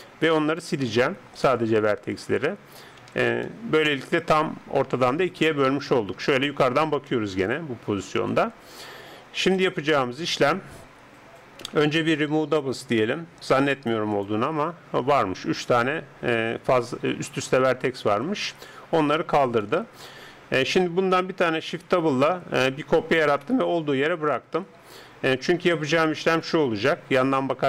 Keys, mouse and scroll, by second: 1.5 x, 3.0 z, 3.5-5.1 middle drag, 5.9 KP_7, 7.1-8.9 middle drag, 8.3 KP_7, 9.5-14.1 middle drag, 11.7 a, 14.3-19.7 drag, 19.7-21.6 middle drag, 21.8 shift+d, 26.3-27.6 middle drag.